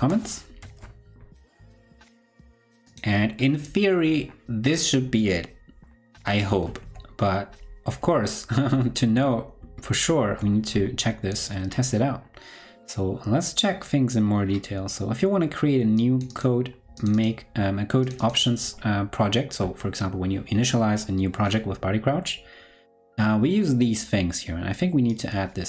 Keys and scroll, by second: 0.4 super+Right, 0.5 super+s, 6.7 ctrl+super+Left, 7.8 ctrl+super+Left, 8.6 ctrl+super+Right, 8.8 ctrl+super+Right, 9.5 ctrl+super+Right.